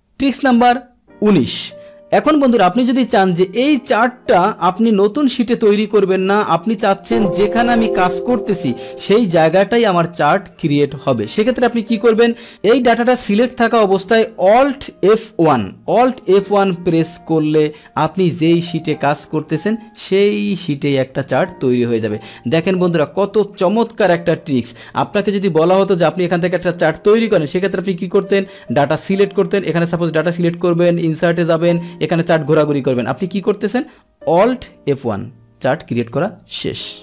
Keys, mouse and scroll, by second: 5.8 right click, 6.8 click, 8.1 click, 12.5 click, 15.3 alt+F1, 16.9-18.3 drag, 20.0-21.0 drag, 22.8 click, 25.5 Delete, 26.8 click, 27.6 click, 29.8 click, 31.2 click, 34.9 alt+F1, 35.2 alt+F1.